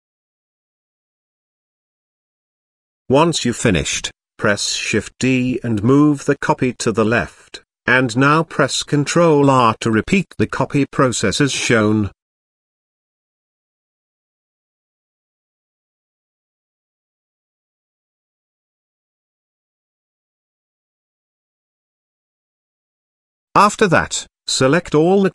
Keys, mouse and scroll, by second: 0.0 shift+middle click, 1.1-1.9 middle drag, 2.1 shift+middle drag, 2.7 z, 3.9 shift+d, 11.7 KP_0, 12.9 shift+r, 13.8 shift+r, 13.9 shift+r, 21.0-21.5 middle drag, 21.8 shift+middle drag, 24.3 shift+click, 24.8 shift+click, 25.0 shift+click, 25.2 shift+click.